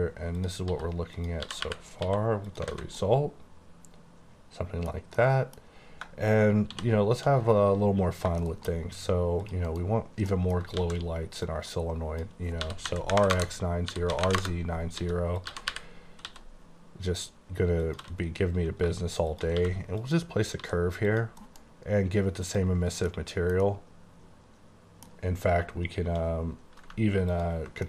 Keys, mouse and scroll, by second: 0.5 click, 0.8-2.1 typing, 1.2 click, 2.6 click, 2.8 alt+a, 3.1 middle click, 5.3 middle click, 6.8 c, 7.4-8.3 scroll up 15, 8.5 shift+middle click, 8.6 shift+KP_1, 9.5 click, 9.8 KP_Decimal, 10.1 scroll up 1, 10.4 middle click, 10.9 shift+a, 11.4 click, 12.7-16.3 typing, 13.4 KP_Enter, 14.4 KP_Enter, 15.5 click, 17.9 click, 18.1 s, 19.4 shift+click, 19.6 q, 20.1 click, 20.7 s, 21.2 click, 21.5 alt+m, 22.5 click, 23.2 middle click, 23.7 double middle click, 27.4 ctrl+click.